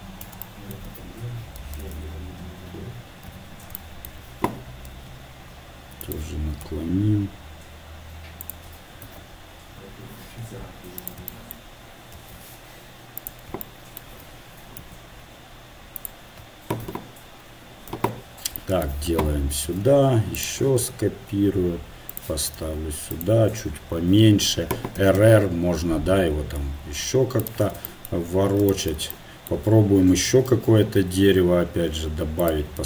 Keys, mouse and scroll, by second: 3.8 z, 5.2 r, 6.7 g, 9.0 KP_7, 10.6 r, 11.3 click, 12.2 shift+d, 14.8 s, 16.8 KP_7, 17.9 KP_7, 19.7 shift+d, 20.8 r, 22.6 s, 24.0 KP_7, 25.0 r, 28.3-30.5 middle drag, 30.5 shift+a.